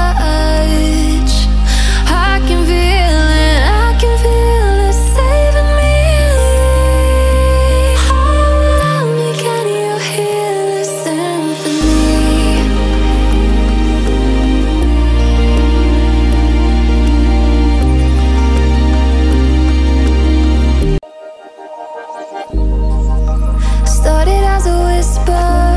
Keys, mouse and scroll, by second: 0.5-4.5 drag, 4.5-7.7 alt+shift+drag, 7.7 ctrl+g, 8.4-13.3 drag, 14.3 ctrl+z, 15.0 ctrl+z, 16.5-20.3 drag, 20.3 ctrl+shift+], 21.4 ctrl+g, 21.6-24.4 drag, 24.4 ctrl+shift+], 24.9 click, 25.3 alt+scroll up 1.